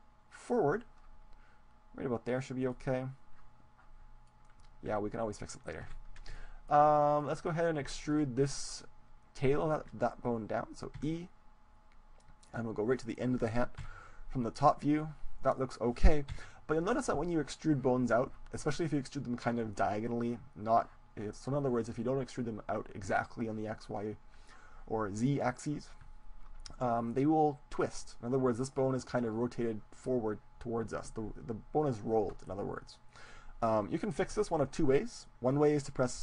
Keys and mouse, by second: 2.7-4.6 middle drag, 4.9 KP_3, 5.9 KP_1, 6.4 middle click, 7.2-8.9 drag, 7.9 middle click, 8.5-12.3 middle drag, 12.1 e, 13.2-15.1 drag, 13.9 KP_7, 16.4 KP_1, 28.7-30.5 right drag.